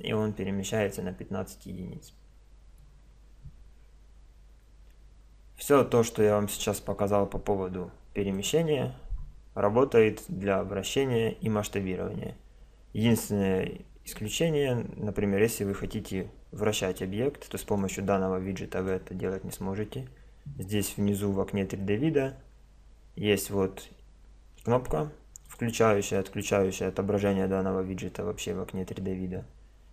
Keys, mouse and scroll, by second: 6.2-8.0 drag, 9.1-17.8 middle drag, 17.8-19.6 drag, 25.4-27.7 drag, 27.7 middle click, 27.8 click.